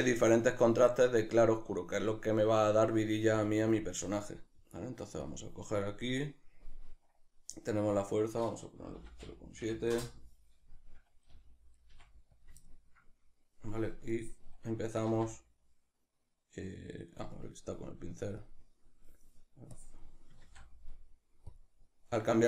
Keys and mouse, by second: 3.3 f, 3.8 click, 10.0 Return, 10.0-12.4 drag, 11.9 f, 12.6-14.1 ctrl+middle drag, 14.1-22.4 drag, 15.0 ctrl+z, 20.5 ctrl+z.